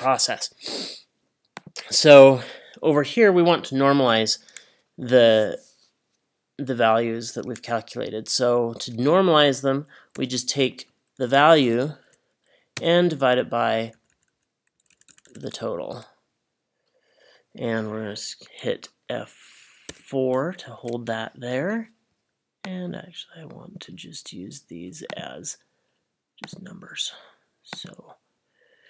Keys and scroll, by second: 10.2 =, 11.3 Left, 11.5 Left, 11.6 Left, 12.8 /, 13.8 Down, 13.9 Down, 14.7 Left, 14.9 Left, 15.1 Left, 15.3 Left, 15.4 Left, 19.9 F4, 20.8 Return.